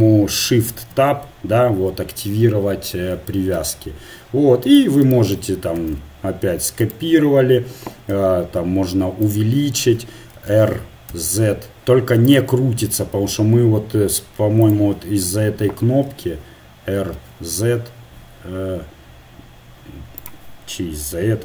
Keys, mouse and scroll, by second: 0.7 shift+Tab, 3.6 g, 5.8 shift+d, 8.1 s, 10.3 r, 14.6 click, 14.8-16.5 right drag, 16.1 r.